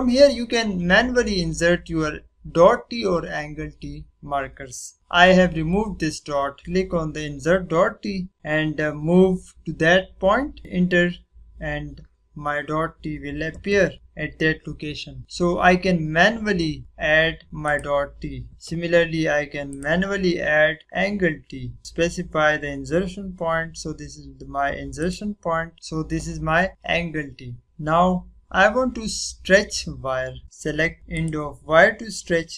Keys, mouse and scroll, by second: 0.2 click, 6.6 click, 10.6 click, 19.4 click, 21.5 click, 27.6 click, 31.1 click, 32.2 click.